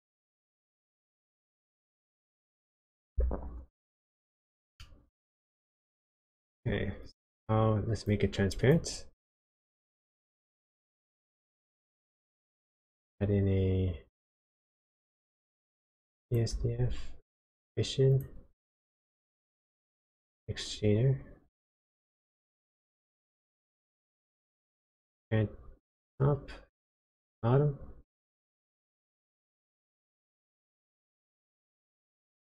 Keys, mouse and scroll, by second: 4.2-4.8 scroll down 1, 4.8 middle click, 5.6 click, 7.0 click, 8.6 click, 8.9-9.4 scroll down 2, 9.4 middle click, 10.0 click, 10.7 shift+a, 16.5 shift+a, 19.6 shift+a, 24.8 click, 26.9 click, 29.8 click, 32.3 click.